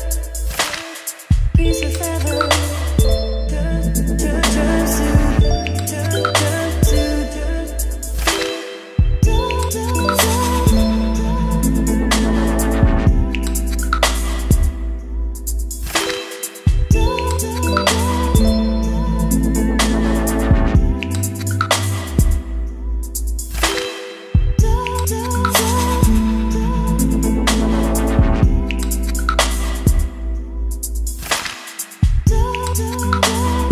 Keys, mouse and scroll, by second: 0.0-1.7 typing, 3.0 e, 4.4 p, 4.7 t, 5.8-13.7 typing, 14.1 Return, 15.4-19.9 typing, 16.6 Return, 18.0 Return, 20.2 Return, 21.8-23.0 typing, 23.5 ctrl+z, 24.0 d, 24.2 Return, 25.5-27.3 typing, 29.5 Return, 30.2-33.7 typing.